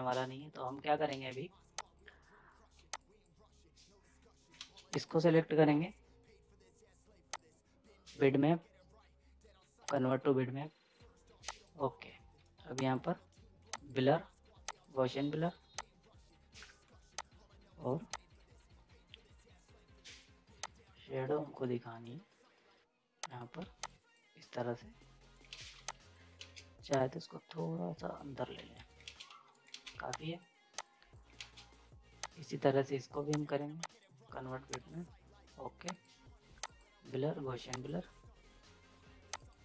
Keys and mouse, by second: 1.0 z, 1.1 ctrl+space, 1.8 click, 2.7 z, 2.9 click, 4.5 ctrl+space, 4.9 click, 7.3 click, 9.9-17.1 drag, 23.2 click, 23.6 z, 23.8 click, 25.1 right click, 25.5 ctrl+space, 25.7 z, 25.9 click, 26.4 ctrl+space, 26.9-28.5 drag, 28.5 z, 28.7 right click, 29.0 ctrl+space, 29.3 z, 29.5 right click, 29.7 ctrl+space, 29.9 z, 30.1 click, 31.4 ctrl+space, 32.2 click.